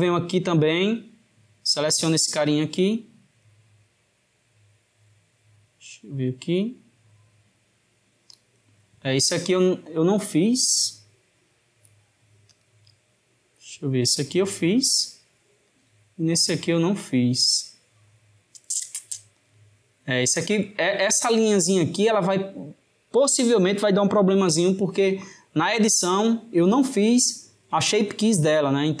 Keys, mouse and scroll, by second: 0.9 click, 2.5-9.3 middle drag, 12.6 click, 14.1-16.4 middle drag, 16.4 click.